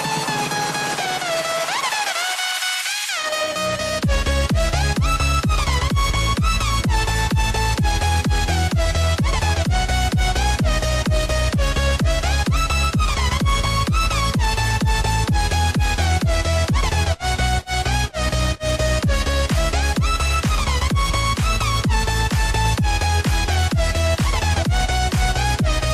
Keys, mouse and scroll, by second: 0.5 click, 1.6 click, 2.3 click, 4.1 click, 4.7 click, 5.9 click, 7.3 click, 8.3 shift+click, 8.9 click, 11.3 click, 12.5 click, 14.3-15.6 drag, 19.1 click, 20.0 s, 22.2 click, 23.8 click, 25.2 click.